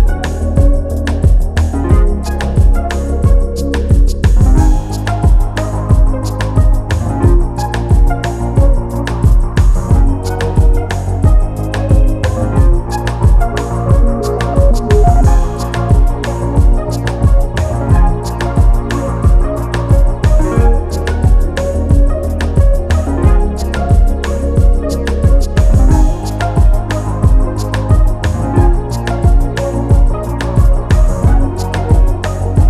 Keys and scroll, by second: 14.5 Delete, 25.7-28.4 typing, 29.8 3.